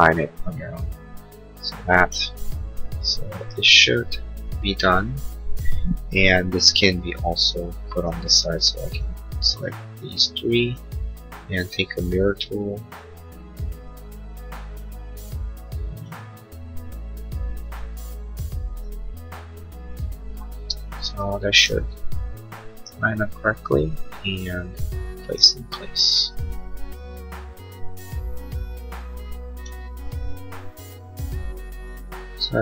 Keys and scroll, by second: 29.5 ctrl+s.